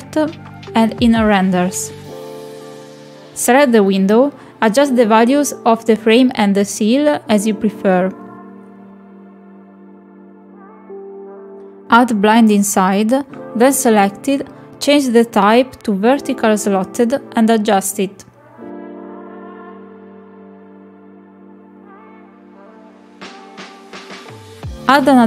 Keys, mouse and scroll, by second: 0.3 click, 0.9 middle click, 1.5 middle click, 1.9 click, 2.3 middle drag, 2.9 shift+middle click, 3.4 click, 5.1 click, 5.7-6.5 middle drag, 6.7 shift+middle click, 6.9 middle click, 7.2 shift+middle click, 7.9 click, 9.2 click, 10.4 click, 11.7 middle drag, 12.4-12.9 shift+middle drag, 14.3 click, 15.3 click, 16.2 click, 18.4 middle drag, 19.8 click, 21.0 click, 21.1 click, 21.3 click, 21.5 click, 21.6 click, 21.8 middle click, 22.8-24.4 drag.